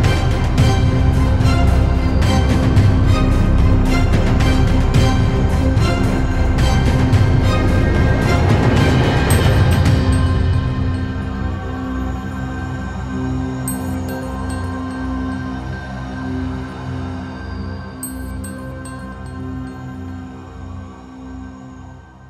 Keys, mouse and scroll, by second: 0.3 KP_7, 2.1 r, 3.3-3.6 scroll up 3, 3.6 shift+middle click, 4.1 e, 5.6-6.7 scroll down 2, 6.7 middle click, 7.4 KP_7, 8.3 KP_3, 8.7 scroll up 3, 9.3 s, 11.0 middle click, 11.9 KP_7, 12.6-13.8 middle drag, 13.8 KP_1, 14.6 r, 16.7 middle click, 17.0-17.5 scroll down 1, 17.5 e.